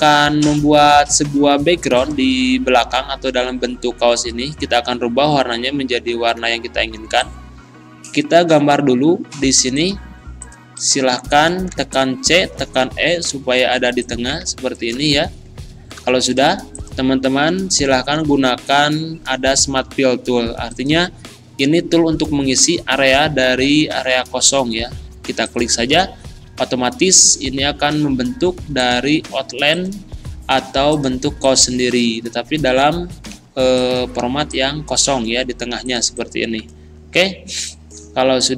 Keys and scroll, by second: 11.7 c, 12.4 e, 15.2 ctrl+z, 16.2 ctrl+shift+z, 33.4 Delete.